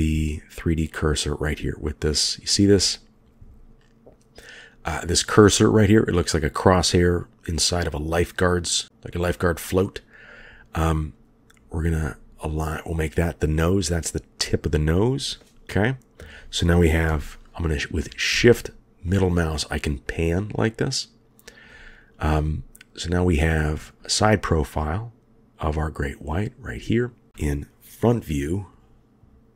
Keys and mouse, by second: 17.3-18.0 shift+drag, 19.2-21.8 shift+drag, 23.8-24.5 shift+drag.